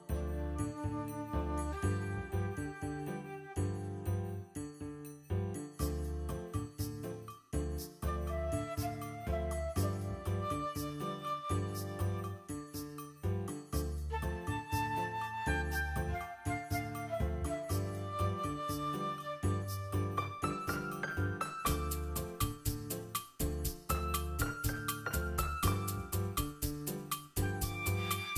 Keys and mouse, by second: 0.0-3.3 typing, 0.2 click, 0.4 click, 0.9 click, 1.6 click, 2.1 drag, 2.9 click, 3.3 click, 3.8 click, 4.0 click, 4.2 ctrl+middle click, 4.4 `, 4.5-4.8 drag, 5.0 shift+Left, 5.5 a, 5.5 a, 5.8 click, 6.5 click, 6.7 ctrl+Left, 7.3 click, 7.8 click, 8.0 click, 8.1 space, 8.3 alt+shift+z, 8.7 space, 9.1 click, 9.3 click, 10.0 ctrl+middle click, 10.1-10.5 drag, 10.6 click, 10.8 ctrl+middle click, 11.0 click, 11.2 ctrl+middle click, 11.3 click, 11.8 click, 12.0 ctrl+middle click, 12.2 click, 12.3 a, 12.5 click, 12.6 a, 12.9 click, 13.7 click, 14.5 click, 14.7 click, 15.2 click, 15.7-16.0 drag, 16.2 click, 16.5 click, 16.8 click, 17.1 click, 17.2-18.3 typing, 17.4 click, 17.7 click, 18.4 click, 19.0 click, 19.3 click, 19.5-21.3 typing, 19.9 click, 20.1 ctrl+middle click, 20.5 click, 20.8 click, 21.5 click, 22.6 click, 23.1 drag, 23.6-25.6 typing, 23.8 shift+click, 24.3 click, 25.0 click, 25.4 alt+shift+z, 25.8-26.2 click, 26.4 click, 26.8 shift+middle click, 26.9 drag, 27.1 space, 28.0 space, 28.1 click, 28.2 alt+shift+z.